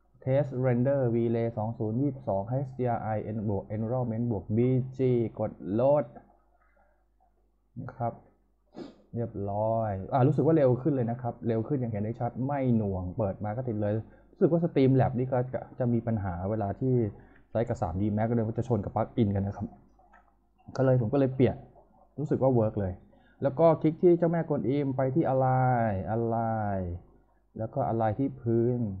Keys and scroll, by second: 16.9-17.8 typing, 20.4-21.3 typing.